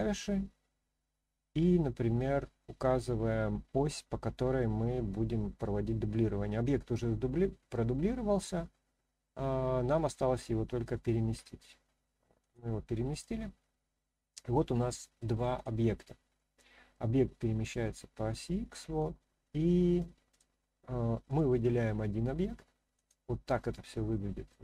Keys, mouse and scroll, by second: 12.4 click, 13.1 click, 14.3-15.2 middle drag, 15.5 click, 16.3-16.9 middle drag, 18.5-19.0 middle drag, 20.3 click, 21.2 click, 23.0 click, 23.9-24.5 middle drag.